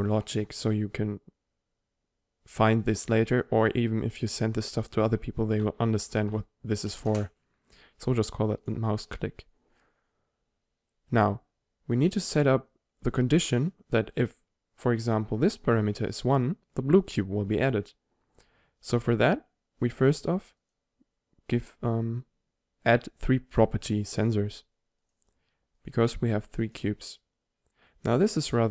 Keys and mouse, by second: 8.7-11.2 middle drag, 11.2-13.7 right drag, 13.7 middle click, 20.7-22.4 middle drag, 24.3-27.8 drag.